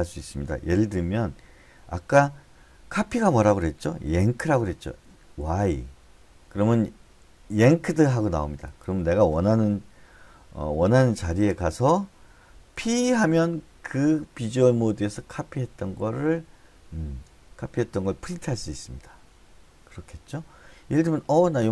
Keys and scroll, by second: 5.9 y, 13.2 p.